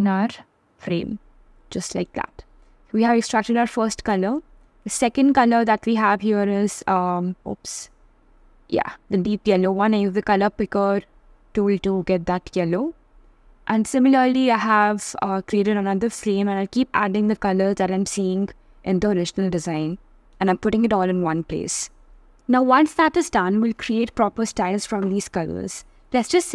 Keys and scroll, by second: 4.9 super+z, 9.0 super+c, 9.2 super+v, 15.9 super+c, 19.2 super+v.